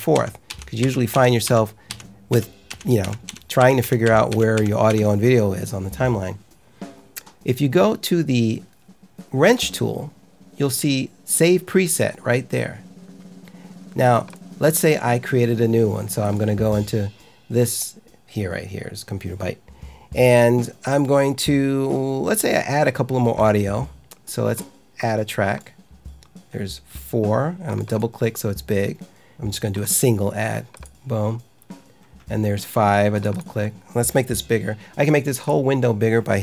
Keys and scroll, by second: 0.1 F9, 0.4 F10, 0.7 F9, 1.0 F10, 1.4 F9, 1.8 F10, 2.2 F9, 2.6 F10, 2.9 F9, 3.2 F10, 3.5 F9, 3.7 F10, 4.0 F9, 4.2 F10, 4.5 F9, 4.8 F10.